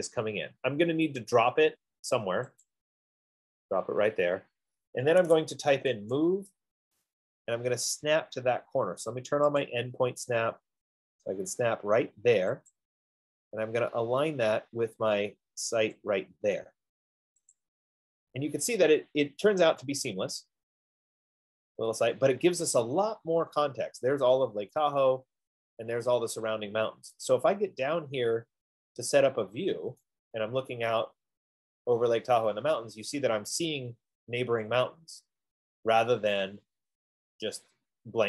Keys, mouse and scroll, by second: 3.1 click, 5.9-7.2 typing, 6.4 Return, 7.2 click, 10.2 click, 13.5 click, 15.8 F15, 16.4 click, 18.3 click, 19.5 middle click, 21.8 scroll, 23.1 right click, 27.6 right click, 28.1 middle click, 28.2-29.2 scroll, 29.8-30.2 scroll.